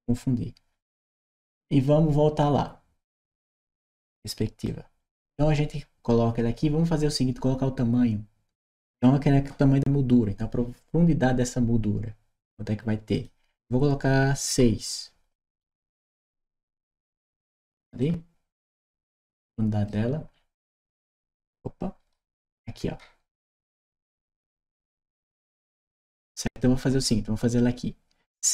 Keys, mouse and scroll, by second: 3.2 click, 3.8 click, 4.5 right click, 13.0 click, 15.6 Return, 17.8 right click, 18.7 middle click, 18.7-19.1 scroll up 1, 19.1 right click, 20.1 middle click, 20.1 scroll up 1, 20.4-23.2 right drag, 21.9 w, 24.6-25.8 right drag, 26.3 right click.